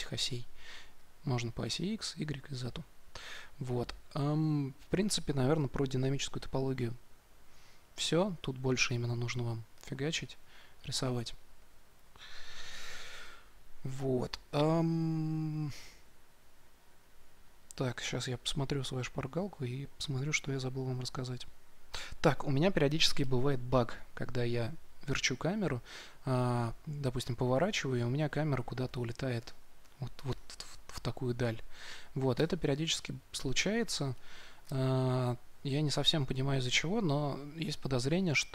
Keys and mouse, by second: 0.9-2.6 drag, 3.1-4.9 drag, 8.1-27.1 drag, 32.3 Tab, 34.8 KP_Decimal.